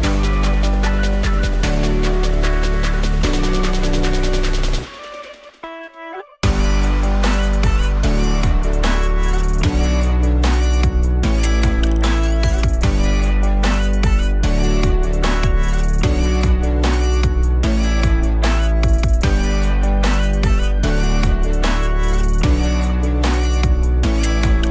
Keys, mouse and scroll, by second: 0.5-3.1 drag, 3.3-3.7 scroll up 1, 4.8-7.3 drag, 8.7-9.4 drag, 9.7 scroll down 1, 14.4-15.8 drag, 15.8-16.6 scroll down 4, 16.6-17.5 alt+drag, 17.5 shift+a, 20.4 g.